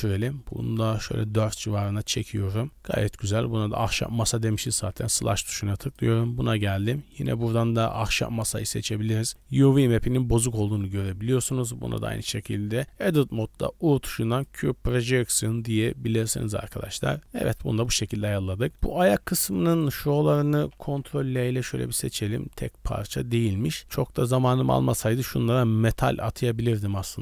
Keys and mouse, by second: 2.4 middle click, 5.8 click, 7.1-8.1 drag, 8.6-9.0 middle drag, 9.3-9.8 shift+middle drag, 10.7 Tab, 12.0 u, 14.9 Tab, 15.6-17.8 middle drag, 18.7 middle click, 19.4 Tab, 21.2 ctrl+l, 22.4-23.8 middle drag.